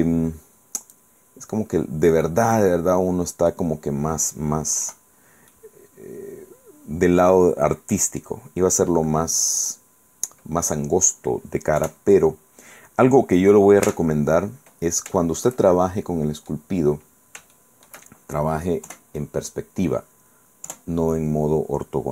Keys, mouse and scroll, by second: 2.4-3.8 middle drag, 5.0 KP_5, 5.6-8.5 drag, 8.8-9.2 scroll down 1, 11.9 KP_5, 14.0 Tab, 14.4-14.8 scroll up 1, 14.8 scroll down 1, 15.3-16.8 shift+middle drag, 17.3 scroll down 3, 17.6 shift+middle click, 19.0 KP_5, 20.8 KP_5.